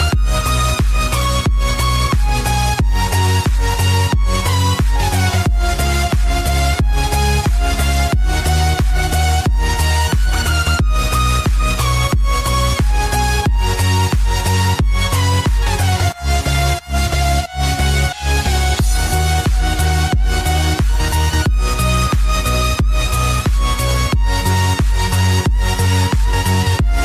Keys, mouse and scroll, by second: 0.7 right click, 2.2 click, 2.7 scroll down 1, 3.2-3.5 scroll up 1, 4.1 scroll down 1, 5.9 click, 16.0 scroll down 1, 17.4 click, 22.6 click.